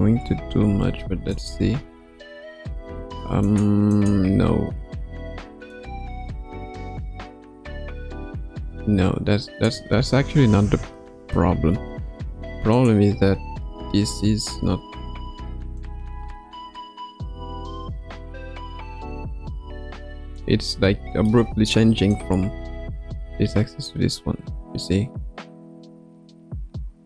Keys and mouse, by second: 0.0 KP_0, 1.3 click, 1.6 space, 2.8 space, 3.4 click, 3.9 click, 4.3 space, 5.2 space, 5.7-9.7 drag, 10.3 ctrl+z, 10.7 ctrl+z, 11.1 ctrl+z, 11.5 ctrl+z, 12.7 click, 15.7-20.4 drag, 20.7 middle click, 22.1-27.0 drag.